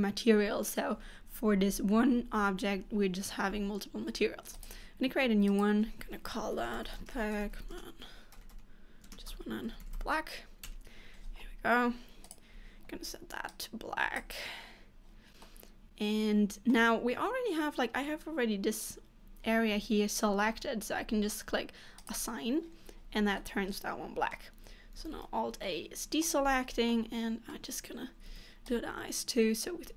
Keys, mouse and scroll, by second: 15.7 middle click, 22.1 click, 23.5 middle click, 25.2 alt+a, 25.7 middle click, 26.5 scroll up 2, 27.0 middle click, 28.3 c.